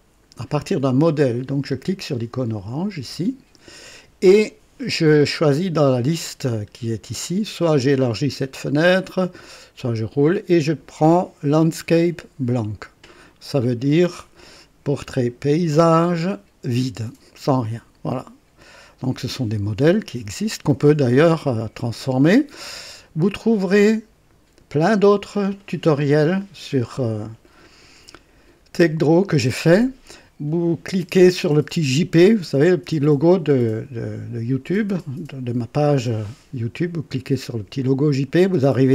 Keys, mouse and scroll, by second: 2.5 click, 8.1-9.8 drag, 17.3 click.